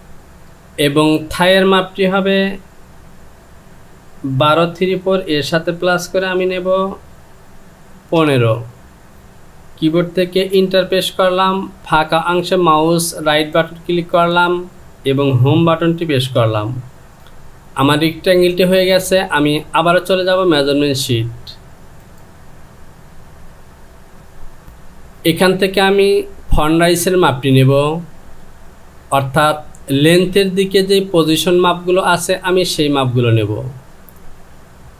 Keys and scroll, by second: 6.4 KP_1, 8.2 KP_5, 10.6 Return, 16.3 Home.